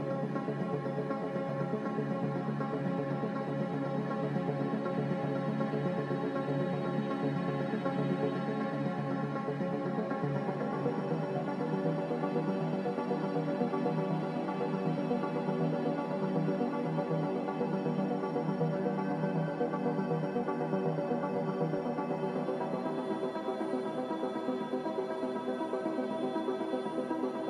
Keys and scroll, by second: 3.7 x, 4.7 z, 8.2 x, 9.3-9.8 typing, 9.8 Return, 12.7-14.2 typing, 16.0 Return, 16.0 typing, 17.3-18.0 typing, 20.0-21.5 typing, 23.3-24.0 typing, 26.7 4, 26.7 0.